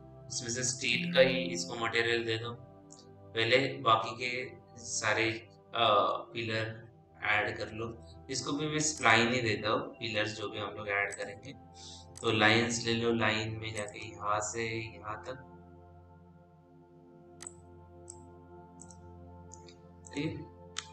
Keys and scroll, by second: 8.3 f.